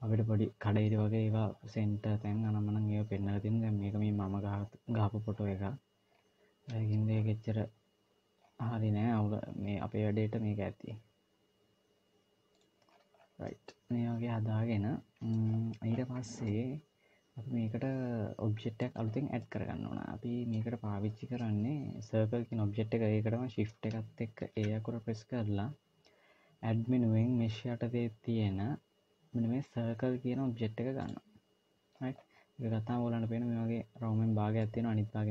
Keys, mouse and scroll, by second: 5.3-5.8 scroll up 2, 7.0 scroll down 1, 7.0-8.2 scroll down 2, 8.2 scroll down 1, 10.0 g, 12.7-13.3 scroll down 9, 13.3 middle click, 15.5 scroll down 1, 15.7-16.0 scroll up 4, 16.3 middle click, 18.9-19.3 scroll down 2, 19.3 middle click, 24.4 shift+a, 32.0-33.3 scroll up 5, 34.5 middle click.